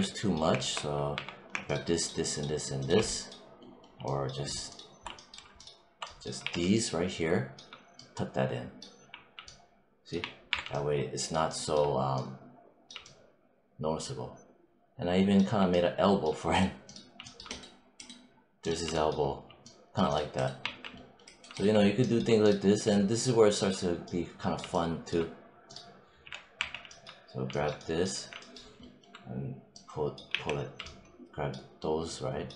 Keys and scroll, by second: 1.0 q, 6.3 w, 8.9 3, 10.1 1, 10.4 3, 20.5 1, 26.1 5, 28.0 5, 30.2 z.